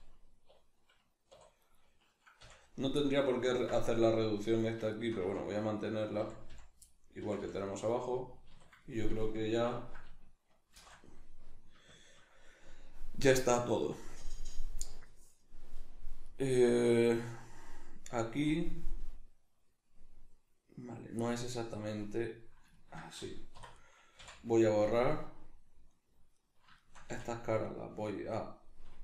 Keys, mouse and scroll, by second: 1.3 2, 1.7 right click, 2.4 f, 3.0-4.6 middle drag, 4.6 right click, 5.2 f, 5.8 right click, 6.2 f, 6.9-23.9 middle drag, 7.2 f, 8.5 a, 10.7 shift+n, 23.5 3, 23.7 right click, 24.2 x, 26.3 middle click, 26.3 right click, 26.8 middle click, 26.8 shift+right click, 27.0 x.